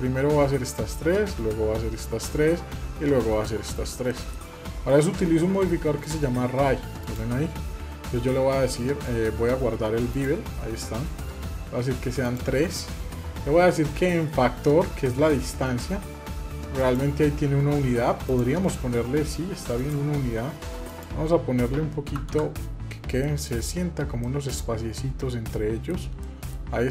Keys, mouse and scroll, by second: 3.9 middle click, 6.9 click, 9.9 click, 12.0 click, 16.6 click, 18.0-22.6 drag, 23.0 middle click, 23.4-24.2 scroll up 4, 24.0-25.7 middle drag, 25.7 scroll down 2, 26.0-26.3 middle drag, 26.5 scroll up 2, 26.7-26.9 middle drag.